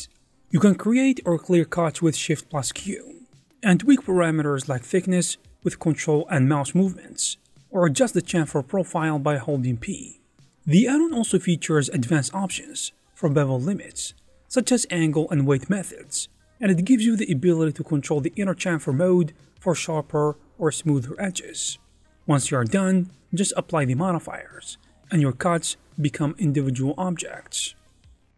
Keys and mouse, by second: 0.6 middle click, 0.8 alt+shift+z, 1.2 middle click, 1.5 ctrl+z, 2.2 shift+q, 6.1 o, 8.0 middle click, 8.3 alt+shift+z, 8.4 alt+shift+z, 8.6 shift+click, 9.4 shift+q, 10.6 middle click, 11.1 shift+q, 17.8 click, 18.3 middle click, 18.5-21.9 typing, 20.2 alt+z, 20.2 shift+middle click, 21.0 alt+shift+z, 21.2 alt+2, 21.4 middle click, 22.6 alt+shift+z, 22.6 middle click, 22.8 alt+shift+z, 23.2 shift+q, 23.5 Tab, 23.7 middle click, 24.9 ctrl+a, 25.4 shift+a, 26.3 click, 26.8-28.3 typing, 27.0 alt+z, 27.2 middle click, 27.4 alt+z.